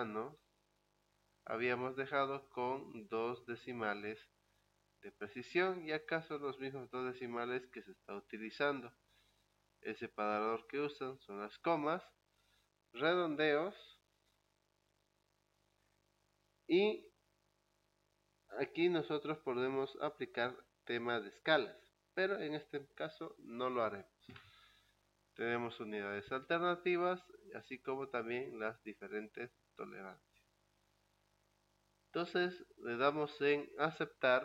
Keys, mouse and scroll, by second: 25.3 click, 27.6 click, 33.2 click.